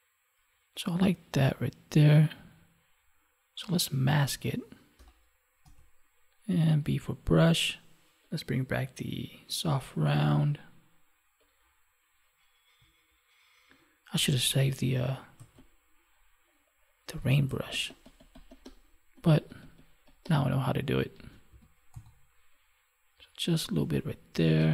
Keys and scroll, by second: 4.9 ctrl+i, 21.2 ctrl+1, 24.3 space.